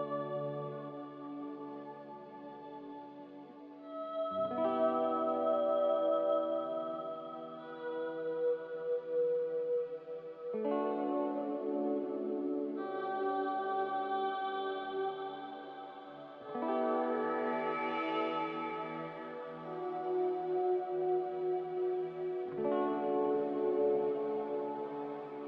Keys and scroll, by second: 5.0 n, 11.1 ctrl+z, 15.6 m.